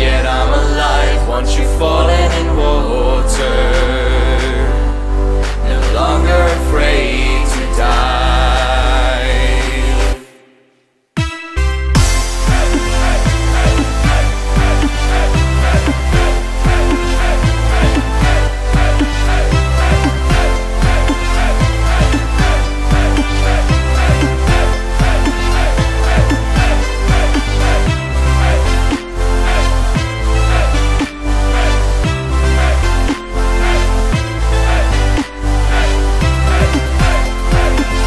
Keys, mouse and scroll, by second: 2.8 click, 3.8-6.1 drag, 7.7-8.4 scroll up 3, 8.4-8.9 scroll down 2, 9.3 shift+a, 16.5-17.4 drag, 17.4 ctrl+alt+KP_0, 20.8-23.8 drag, 27.7-36.7 drag, 36.7 KP_0, 37.2-38.0 drag.